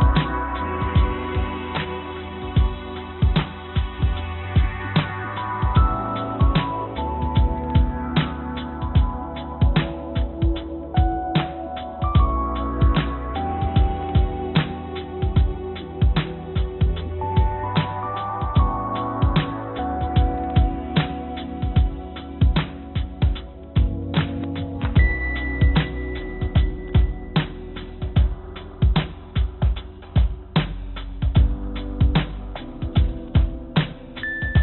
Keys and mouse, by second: 5.1-6.4 drag, 5.7 BackSpace, 5.7 BackSpace, 7.4-8.7 drag, 8.1 BackSpace, 8.1 BackSpace, 14.7 click.